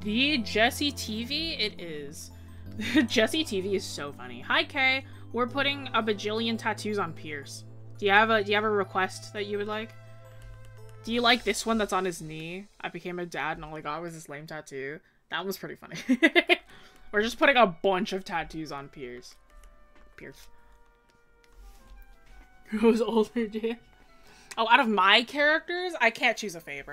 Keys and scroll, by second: 1.7 scroll up 1.